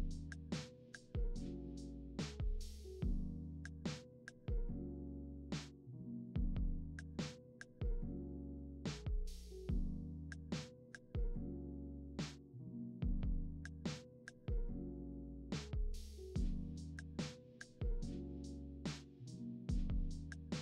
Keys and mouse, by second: 0.0 `, 0.7 `, 1.6-3.4 middle drag, 3.7-5.6 middle drag, 6.2 ctrl+z, 9.1 right click, 9.3 right click, 11.7 right click, 12.1-15.4 middle drag, 15.4 click, 16.1 middle click, 16.1 click, 16.5 middle click, 16.9 click, 17.1-18.9 middle drag, 17.9 s, 18.9 click.